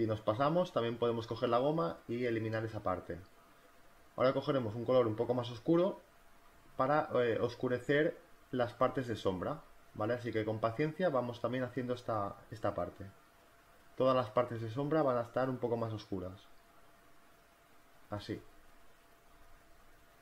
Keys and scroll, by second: 5.1 [, 12.8 ], 15.6-16.6 typing, 18.3-20.2 typing.